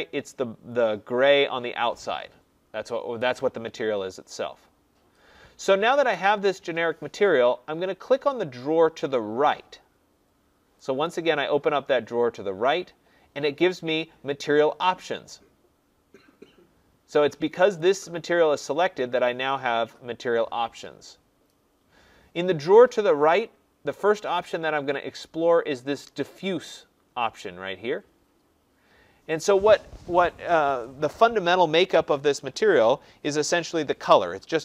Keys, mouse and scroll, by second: 11.0-13.8 drag, 17.7 click.